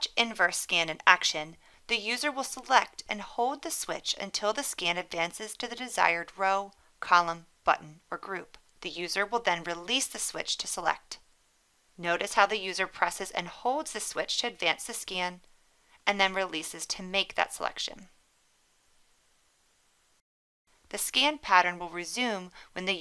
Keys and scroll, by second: 15.0 1, 19.1 1.